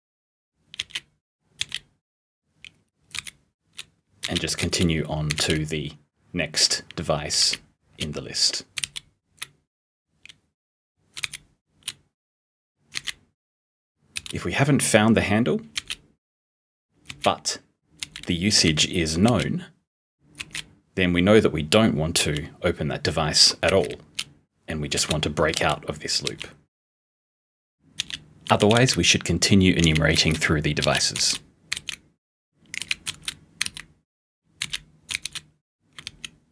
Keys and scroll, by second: 5.4 *, 13.0 *, 14.2 p, 18.7 *, 28.0 p, 28.6 *, 29.8-31.8 typing, 32.8-36.1 typing.